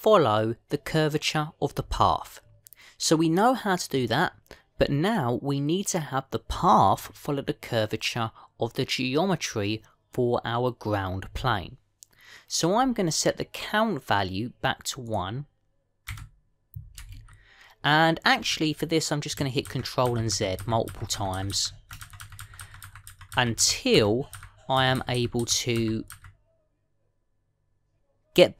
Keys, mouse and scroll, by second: 15.9 click, 20.5 ctrl+z, 20.9 ctrl+z, 21.2 ctrl+z, 21.7 ctrl+z, 22.0 ctrl+z, 22.3 ctrl+z, 22.5-23.1 ctrl+z, 23.3 ctrl+z, 23.5 ctrl+z, 23.7 ctrl+z, 23.9 ctrl+z, 24.5 ctrl+z, 24.9 ctrl+z, 25.3 ctrl+z, 25.7 ctrl+z, 25.8 ctrl+z, 25.9 ctrl+z, 26.0 ctrl+z, 26.7 ctrl+z, 27.0 ctrl+z.